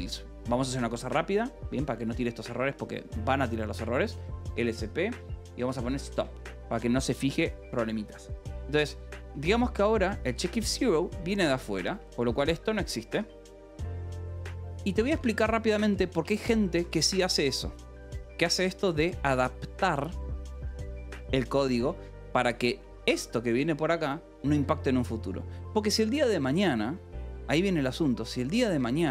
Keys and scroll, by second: 1.2 shift+;, 1.3 :, 1.5 BackSpace, 1.9 Escape, 2.8 :, 4.0-5.0 typing, 6.1 Return, 7.2 ctrl+s, 9.2 j, 10.6-16.7 typing, 14.3 Escape, 17.3 ctrl+s, 22.3 k, 23.3 shift+v, 24.4 Escape, 27.6 j, 28.6 a.